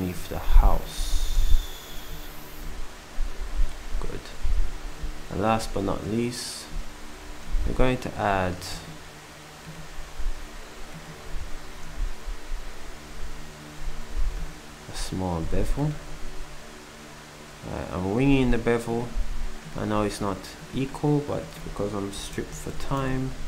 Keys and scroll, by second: 19.9 s.